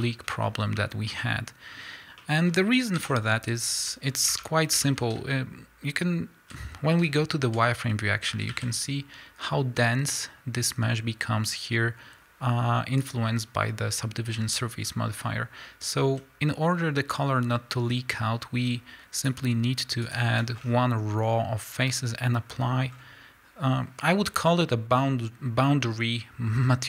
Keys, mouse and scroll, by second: 1.8-2.2 scroll up 2, 3.0 KP_1, 3.9 z, 4.1-4.4 scroll up 2, 4.4 Tab, 5.1 scroll up 2, 5.2 z, 7.8 scroll up 1, 8.3 a, 14.3 scroll down 1, 14.8 scroll up 1, 16.2 z, 19.3 click, 20.1 alt+click, 20.6 scroll down 1, 21.9 scroll up 1, 22.9 scroll down 1, 25.9 scroll up 1.